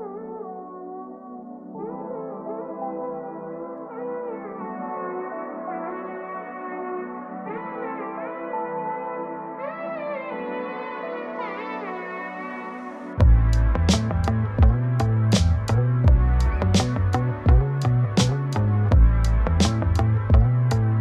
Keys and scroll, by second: 2.8 ctrl+space.